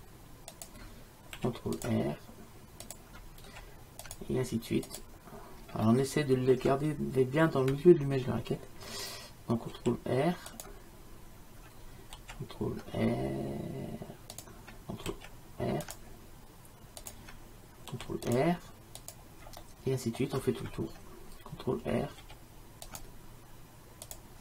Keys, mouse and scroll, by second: 1.4 ctrl+r, 3.5 ctrl+r, 6.0 middle click, 9.8 ctrl+r, 15.2 ctrl+r, 18.0 ctrl+r, 19.7 middle click, 20.1 middle click, 22.3 ctrl+r.